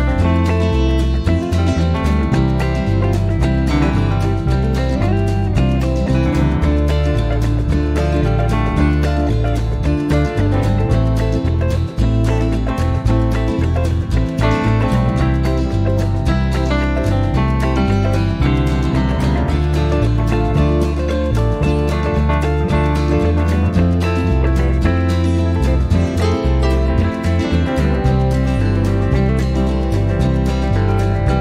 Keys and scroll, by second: 0.0-5.5 typing, 8.7 F2, 10.4-11.8 typing, 13.0-14.0 typing, 15.4 typing, 17.1-18.0 typing.